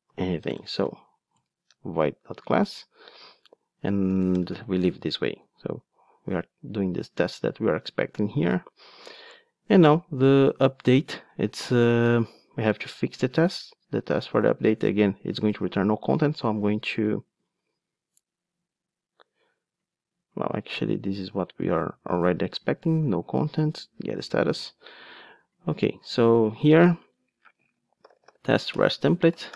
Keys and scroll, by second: 15.8 super+c, 28.7 Return, 29.0 alt+shift+Right.